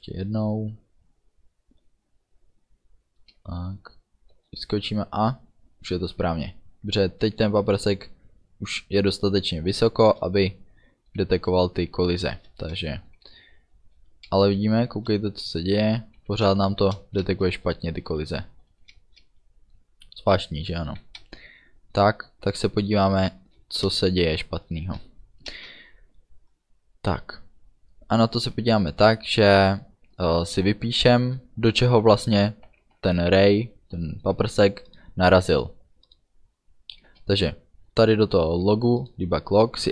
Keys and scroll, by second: 4.4 space, 7.2 space, 10.1 space, 11.3 a, 12.3 space, 16.4 a, 16.6 space, 18.7 a, 19.1 space, 21.0 a, 21.3 space, 23.1 a, 23.5 space, 37.1 space.